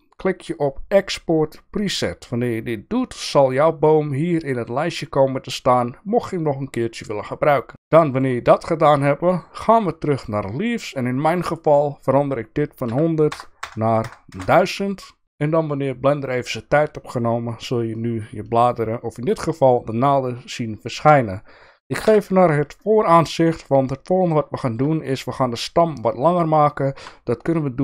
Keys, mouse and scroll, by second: 3.5-7.7 drag, 8.1-10.2 drag, 11.3-15.2 drag, 13.6 KP_0, 15.2-16.3 right drag, 18.0-19.6 middle drag, 20.2-21.3 shift+middle drag, 22.0 KP_1, 23.0 shift+middle click, 24.5 shift+middle drag, 25.1 click, 27.0 Tab.